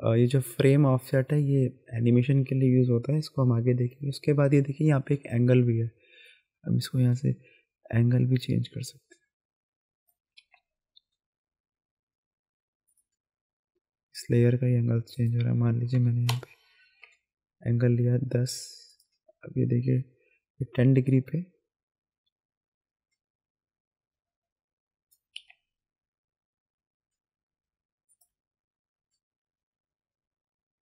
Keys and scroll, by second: 10.4 ctrl+z, 15.9 KP_1, 15.9 KP_0, 16.3 Return, 25.4 ctrl+z.